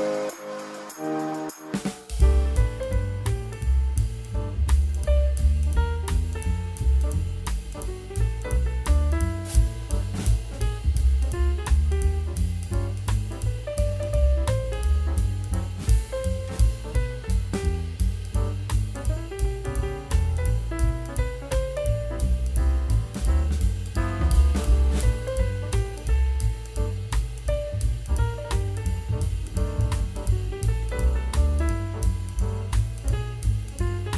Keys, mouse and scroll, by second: 9.5 shift+click, 11.7 double click, 18.3 right click, 33.8 double click.